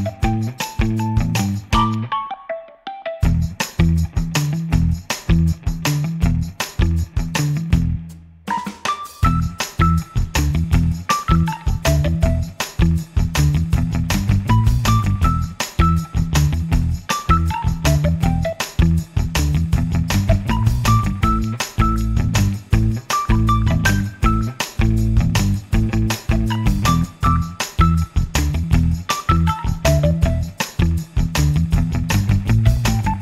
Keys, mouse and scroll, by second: 1.4 click, 2.5 click, 5.5 F1, 6.1 click, 7.1 KP_Subtract, 8.1 space, 12.8 click, 16.2 click, 20.1 KP_Add, 21.5 space, 22.8-23.3 scroll up 4, 25.6-26.8 drag, 27.4 click, 28.5-29.3 drag, 29.9 click, 31.4 space.